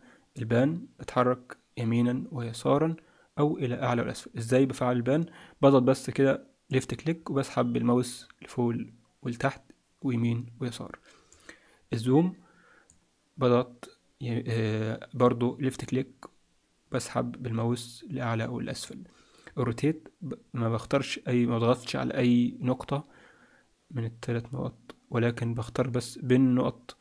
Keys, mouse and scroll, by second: 0.3 click, 6.7 click, 12.9 click.